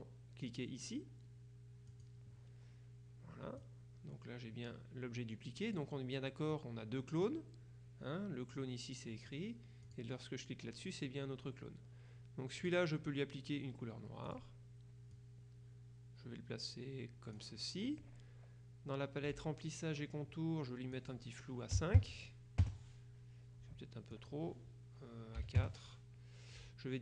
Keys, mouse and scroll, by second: 1.9 click, 3.7-6.3 drag, 6.6 click, 9.9 click, 12.7 click, 14.4 click, 15.2-17.9 drag, 19.3 click, 21.0 click, 21.9 KP_5, 22.7 KP_Enter, 24.2 click, 25.5 KP_4, 25.7 KP_Enter.